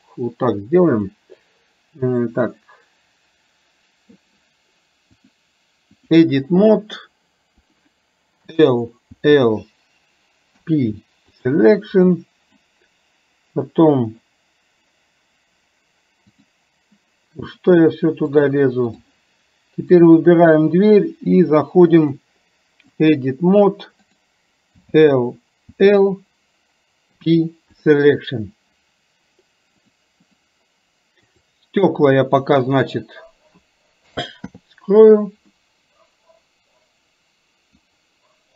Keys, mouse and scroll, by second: 1.3-4.2 drag, 5.2-6.5 drag, 6.6 middle click, 7.6 click, 12.1 middle click, 17.4 click, 18.4 click, 20.1 click, 22.1-23.2 drag, 24.1 click, 30.0-30.5 drag, 31.4 click, 32.8 shift+click, 35.6-37.9 middle drag.